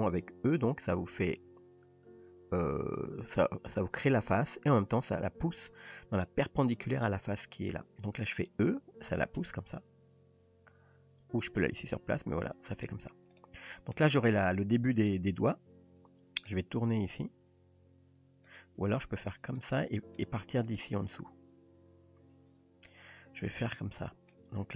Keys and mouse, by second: 9.1 e, 13.4-14.0 middle drag, 14.8 click, 15.1-16.5 middle drag, 17.1 r, 18.8 g, 19.8-20.2 middle drag, 21.1-22.9 middle drag, 23.6-24.4 middle drag.